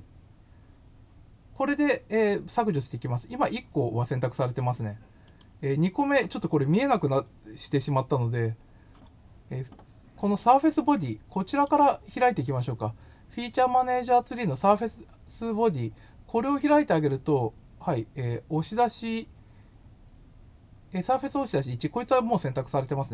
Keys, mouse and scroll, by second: 1.6-3.4 middle drag, 5.2 click, 11.4 click.